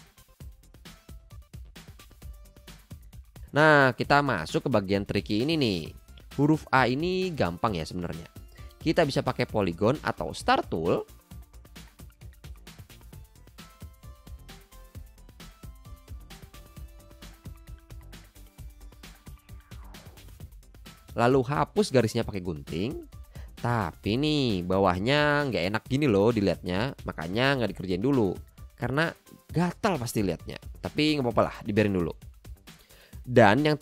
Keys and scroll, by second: 2.0 shift+v, 2.8 v, 11.1 Up, 15.6 shift+v, 17.4 Up, 21.5 c, 22.8 a, 23.6 BackSpace, 26.6 super+z.